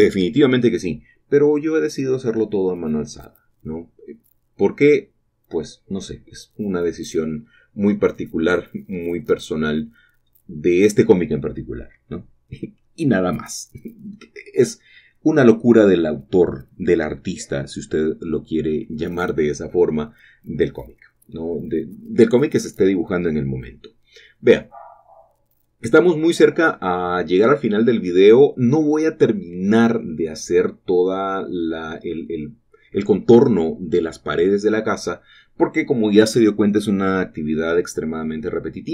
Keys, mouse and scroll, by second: 0.0-0.5 typing, 1.5 shift+click, 2.3 scroll up 1, 2.5 shift+middle click, 5.3 shift+click, 5.3-6.4 typing, 5.7 click, 7.8 shift+click, 8.1 typing, 9.6 shift+click, 9.8-11.5 typing, 11.0 shift+click, 12.9 shift+click, 12.9-13.5 typing, 14.6 shift+click, 15.2 shift+click, 15.5-16.5 typing, 18.1 shift+click, 18.4 click, 18.8-19.2 typing, 20.9 shift+click, 21.2 scroll down 1, 21.2-22.3 typing, 21.4 shift+middle click, 21.7 shift+click, 23.8 shift+click, 24.0 click, 24.4 typing, 25.3 shift+click, 26.0 typing, 28.5 shift+click, 29.2 shift+middle click, 30.0 scroll up 1, 30.8 scroll down 1, 35.2 shift+click, 35.3 typing.